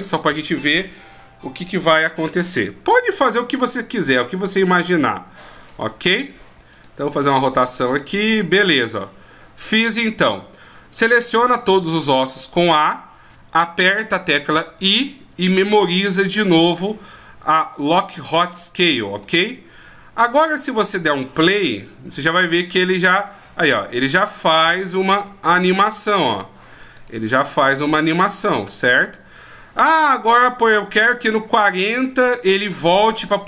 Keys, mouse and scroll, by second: 3.4 right click, 4.2 r, 6.7 right click, 7.1 r, 9.2-10.3 scroll down 1, 10.6 scroll down 1, 11.4 a, 12.6 scroll up 1, 14.7 i, 22.0-33.4 click.